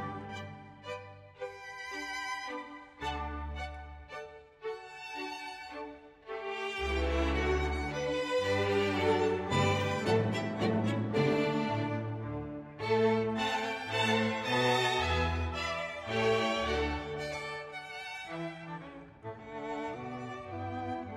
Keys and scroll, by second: 1.9 space, 3.7 Page_Down, 4.1 Page_Down, 4.6 Page_Down, 5.4 Page_Up, 5.5 Page_Down, 6.0 Page_Up, 6.4 Page_Up, 6.5 Page_Down, 6.7 Page_Up, 7.4 Page_Down, 7.5 Page_Up, 7.6 Page_Down, 7.8 Page_Down, 8.3 Page_Up, 8.4 Page_Down, 8.5 Page_Up, 8.7 Page_Down, 9.2 Page_Down, 9.5 Page_Down, 9.7 ctrl+z, 9.9 Page_Up, 10.0 Page_Down, 10.0 Page_Up, 10.1 Page_Down, 10.3 Page_Up, 10.3 Page_Down, 10.6 Page_Down, 10.8 Page_Down, 11.0 Page_Down, 11.2 Page_Down, 11.5 Page_Down, 11.7 Page_Down, 12.8 ctrl+s, 13.5-15.8 typing, 17.0 space, 17.4 Page_Down, 17.6 Page_Down, 17.8 Page_Down, 18.1 space, 18.4 Page_Down, 18.5 Page_Down, 18.9 Page_Down, 19.1 Page_Down, 19.4 space, 19.7 Page_Down, 19.9 Page_Down, 20.2 space, 20.5 Page_Down, 20.8 space.